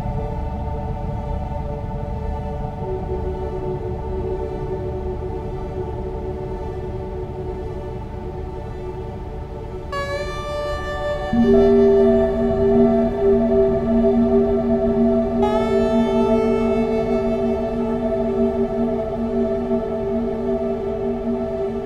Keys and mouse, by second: 1.3 s, 18.9 e.